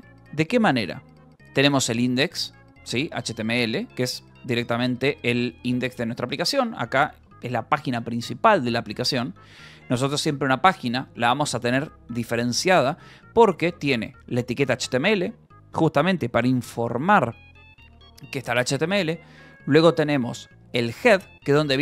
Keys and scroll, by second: 0.9 Return, 1.5-5.3 typing, 3.6 Escape, 6.5 j, 6.9 Escape, 8.8 k, 12.9 j, 14.0 shift+v, 15.1 Escape, 19.2-20.8 typing.